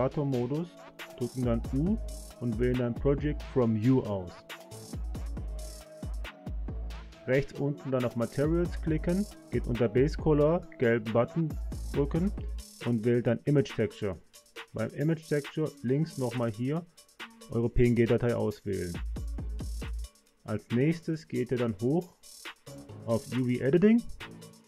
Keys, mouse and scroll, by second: 0.2 Tab, 2.2 u, 7.4 click, 10.5-12.3 drag, 16.7-18.3 drag.